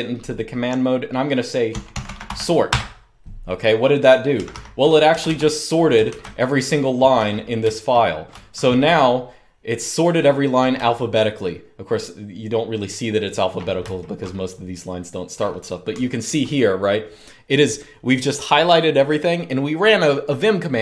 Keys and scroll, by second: 1.2-2.5 typing, 3.8-6.3 typing, 8.0-9.2 typing, 10.5-11.2 typing, 13.7-16.4 typing.